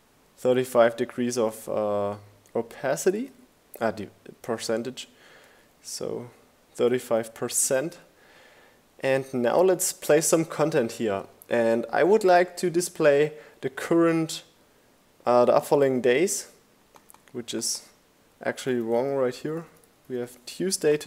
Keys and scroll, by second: 1.4 shift+Down, 16.1-17.5 typing, 19.2 Left, 19.9 Right.